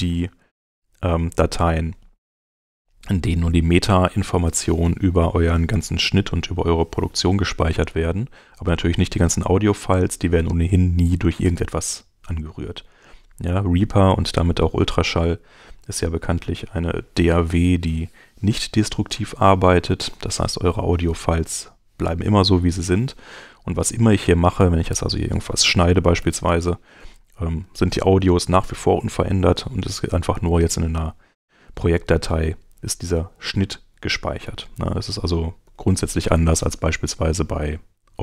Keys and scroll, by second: 0.4 space, 26.2 super+x, 34.4 super+z, 38.1 Home.